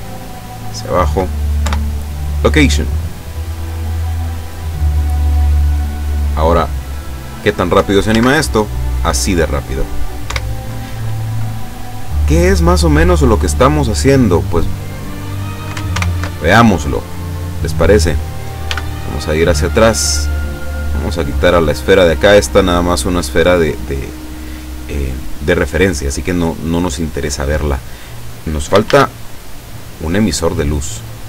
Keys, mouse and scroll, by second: 1.7 ctrl+i, 2.2 click, 7.0 click, 8.2 alt+a, 10.3 Escape, 12.3 click, 14.3 scroll up 1, 16.0 ctrl+alt+KP_0, 17.7 right click, 18.7 g, 18.9 middle click, 20.3 click, 20.8 right click, 21.7-22.8 drag, 23.4-24.3 drag, 28.9 shift+a, 29.9 click, 30.7-31.2 drag.